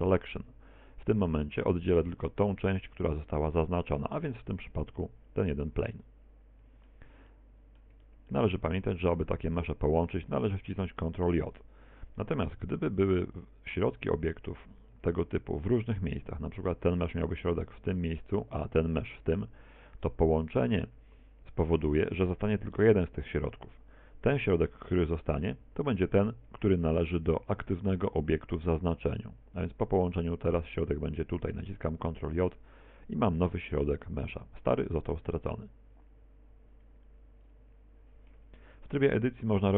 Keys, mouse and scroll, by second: 4.0 Tab, 4.5 right click, 6.1 middle click, 7.3 middle click, 8.0 shift+middle click, 8.6-9.1 scroll down 3, 9.2 shift+right click, 11.3 right click, 12.6 g, 13.4 click, 13.8 r, 14.5 click, 14.6 g, 15.0 click, 18.5 right click, 20.8 right click, 21.6 shift+right click, 26.9 shift+right click, 32.0 ctrl+j, 33.4 r, 36.3-37.2 scroll down 1, 37.2-37.5 scroll down 1, 37.2 x, 38.6 KP_1.